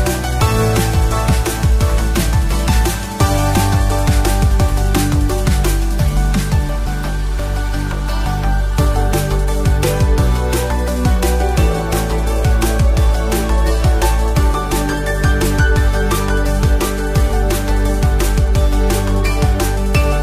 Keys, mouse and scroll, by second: 0.4 click, 1.1 shift+click, 1.7 f, 2.3 click, 3.0 shift+click, 3.8 f, 4.3 scroll down 2, 4.5 shift+middle click, 6.1 click, 6.9 shift+click, 7.8 f, 8.6 click, 9.2 shift+click, 10.2 f, 10.8 click, 11.4 shift+click, 12.1 f, 12.6 click, 13.1 shift+click, 14.0 f, 14.8 click, 15.6 shift+click, 16.2 f, 17.0 click, 17.8 shift+click, 18.5 f, 19.1 click, 19.8 shift+click.